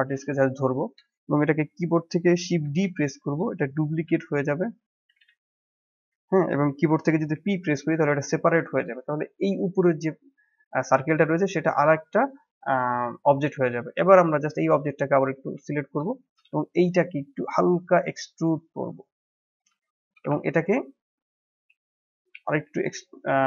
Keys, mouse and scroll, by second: 2.6 shift+d, 5.2 g, 7.3 p, 8.5 Tab, 8.8 click, 9.4 click, 10.6 scroll up 1, 11.0-14.0 shift+middle drag, 14.6 Tab, 15.3 a, 16.0-17.4 shift+middle drag, 17.4 s, 19.5-19.8 scroll up 1, 19.8-22.3 shift+middle drag, 22.3 e.